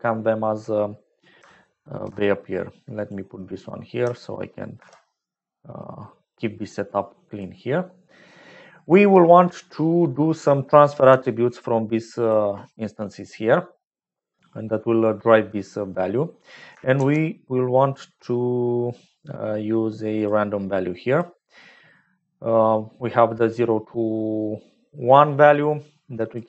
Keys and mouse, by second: 1.4-3.1 alt+drag, 3.2 typing, 4.7 alt+p, 6.3-7.4 drag, 7.7 click, 11.0 g, 15.9 click, 15.9 right click, 16.8 shift+a, 25.6 click.